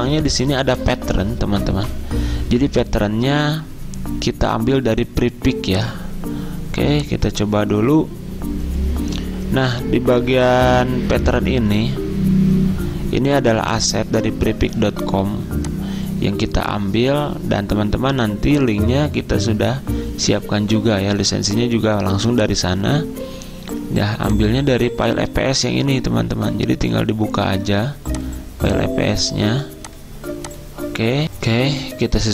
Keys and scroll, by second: 31.3 F9.